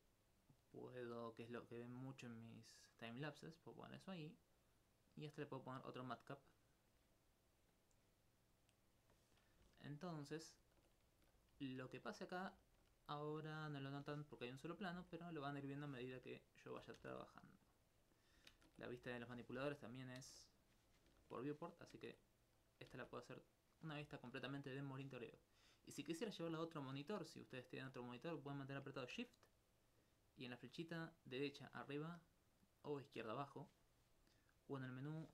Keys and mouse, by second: 2.3 click, 3.4 middle click, 5.2 click, 9.8 alt+click, 9.9 alt+c, 12.7 alt+click, 13.2 right click, 14.5 Tab, 15.0 s, 17.0 ctrl+space, 18.5 ctrl+space, 19.1 click, 19.6 ctrl+space, 20.3 ctrl+space, 21.2 ctrl+space, 22.0 ctrl+space, 22.9 ctrl+space, 33.5 middle click, 34.7-35.3 drag.